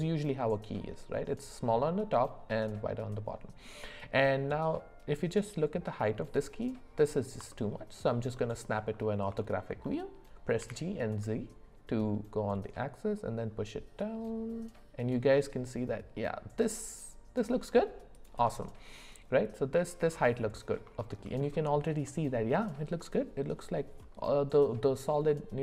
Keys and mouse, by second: 9.4 shift+middle click, 10.6 g, 19.3 middle click, 20.5 middle click, 21.0 shift+middle click, 22.0-23.5 middle drag, 25.3 middle click.